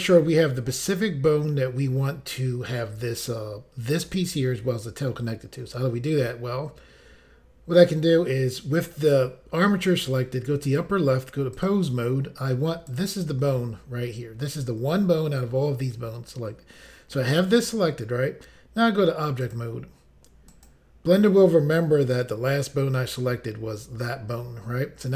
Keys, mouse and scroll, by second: 10.6 click, 11.5 click, 12.9 click, 19.4 click, 19.6 click, 20.5 click, 20.7 click.